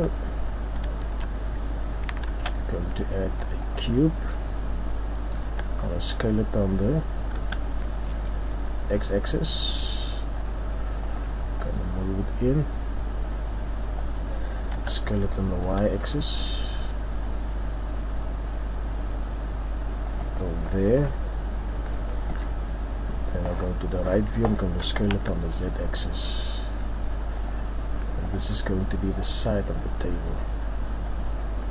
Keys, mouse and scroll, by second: 1.5 shift+scroll up 2, 2.3 shift+a, 11.1 click, 20.2 click, 20.9 KP_3, 31.3-31.7 scroll up 3.